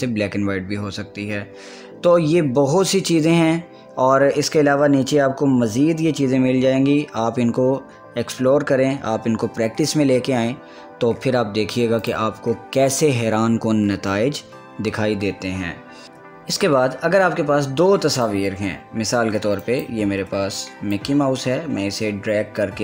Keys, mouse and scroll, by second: 12.7 click, 16.0 click, 16.5 click, 18.8-22.8 drag.